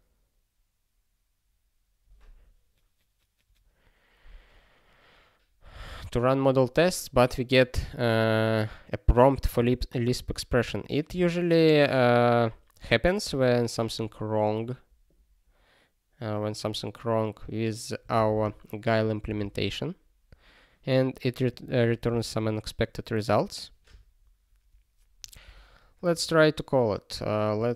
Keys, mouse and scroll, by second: 19.3 super+b, 21.5 click, 22.6 ctrl+s, 26.1 click.